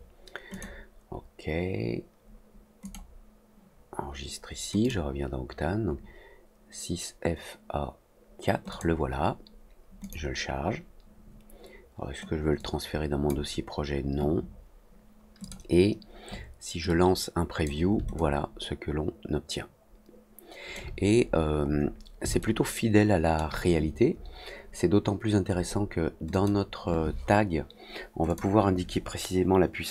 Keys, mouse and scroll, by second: 0.4 click, 2.8 click, 4.7 click, 8.6 click, 9.9 click, 12.5 click, 15.3 click, 18.1-20.7 alt+drag, 21.2 middle click, 21.6 middle click, 22.3 alt+middle click, 26.2 click, 28.2-29.9 drag.